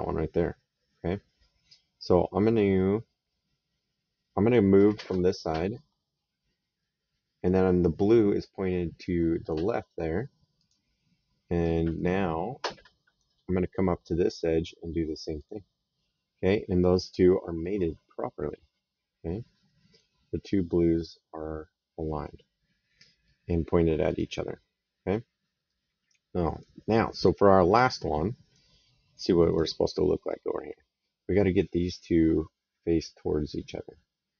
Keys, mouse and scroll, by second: 10.4 click, 11.8 right click, 15.2 click, 16.9 middle click, 17.6 right click, 23.9 click, 25.5 right click, 27.6 right click, 29.3 click.